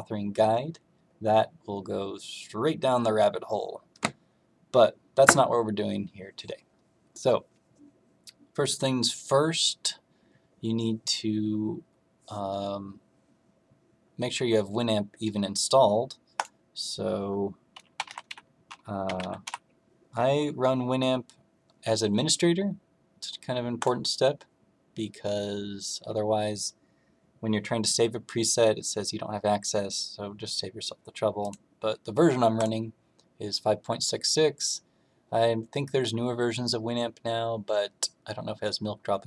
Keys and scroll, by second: 17.9 w.